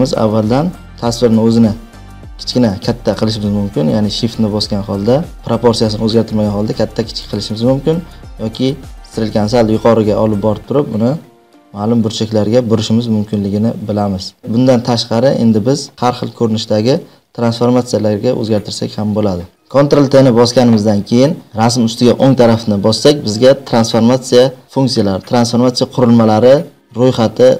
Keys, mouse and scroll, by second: 7.1 shift+click, 11.4 click, 12.2 click, 14.6 click, 17.1 ctrl+z, 21.6 click, 22.1 right click.